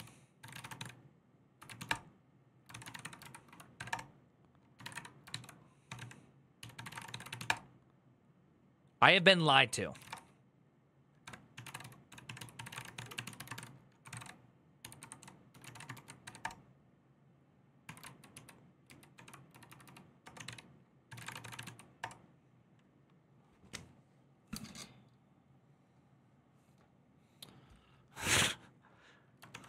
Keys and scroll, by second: 0.0-3.5 typing, 3.7 Return, 4.6-7.6 typing, 4.7 Up, 5.1 ctrl+w, 8.8-21.9 typing, 29.3 ctrl+d.